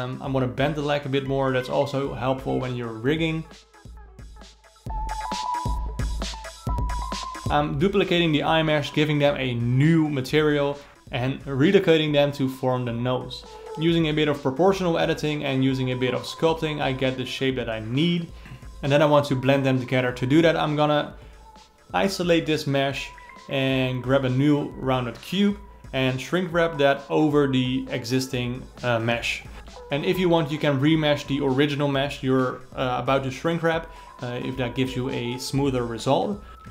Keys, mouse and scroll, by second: 0.7 2, 1.6 alt+click, 2.2 g, 7.3 click, 7.4 shift+d, 9.6 Tab, 9.8-10.1 scroll down 3, 10.1 alt+middle click, 10.7 g, 13.9 Tab, 14.3 a, 14.7 s, 17.3 g, 17.5 ,, 18.8 ctrl+space, 20.6 click, 23.0 alt+middle click, 23.7 ctrl+z, 24.4 alt+middle click, 25.3 click, 25.8-26.8 alt+middle drag, 26.8-29.0 drag, 30.1 click, 32.1 middle click, 32.5 Tab, 32.7-34.0 drag, 34.0-34.5 middle drag, 34.5 Tab, 35.5-36.7 drag.